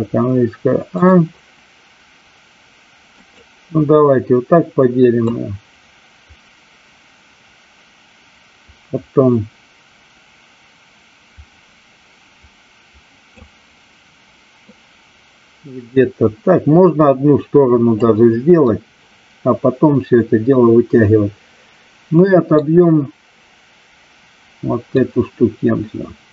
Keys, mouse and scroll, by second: 0.9 click, 3.1 click, 5.2-13.4 drag, 14.6-17.9 drag, 18.6-22.5 middle drag, 24.9-26.3 drag.